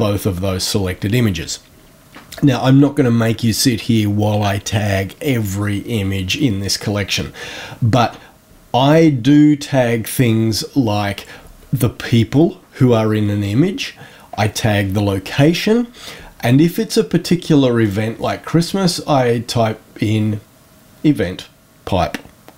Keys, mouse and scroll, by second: 17.7 click.